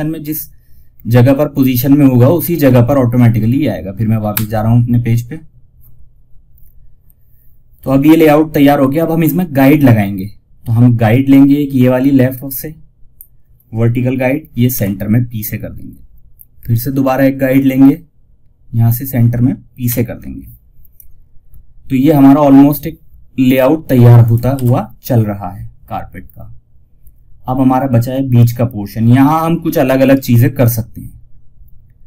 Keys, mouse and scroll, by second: 3.6 Page_Up, 10.6-14.0 drag, 14.0 p, 16.8-19.1 drag, 21.2 p, 23.5 click, 23.8 shift+F2.